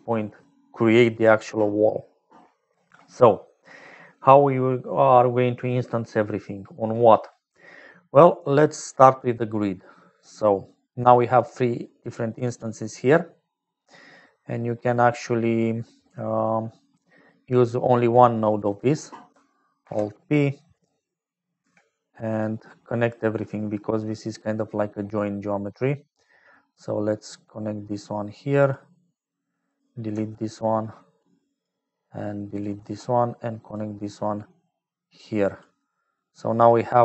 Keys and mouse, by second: 0.0-37.0 typing, 11.0 click, 12.0 click, 13.3 middle click, 14.4 middle click, 15.2 click, 19.8 alt+p, 23.7 click, 24.7 click, 26.4-29.4 drag, 30.6 click, 31.3 click, 32.5 click, 33.7-36.8 drag.